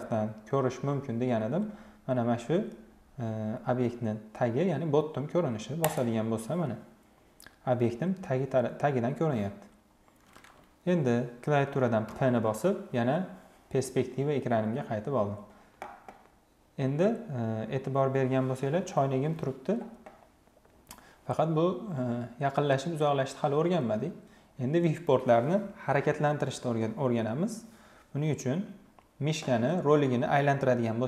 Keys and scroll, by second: 11.7 p.